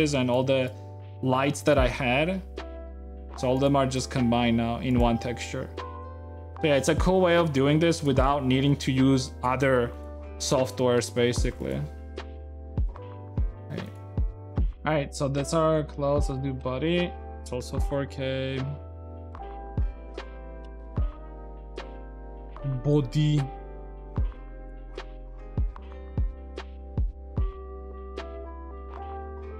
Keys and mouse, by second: 17.3 F12.